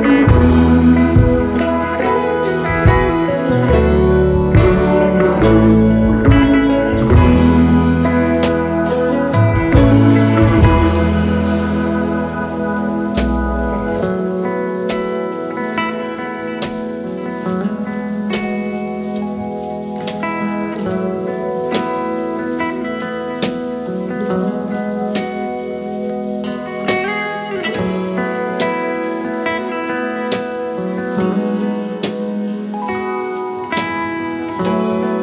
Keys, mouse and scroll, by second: 4.6 shift+a, 7.3-12.0 drag, 13.0 ctrl+t, 15.0 click, 20.9-28.7 drag, 28.7 scroll up 3, 28.8-30.6 drag.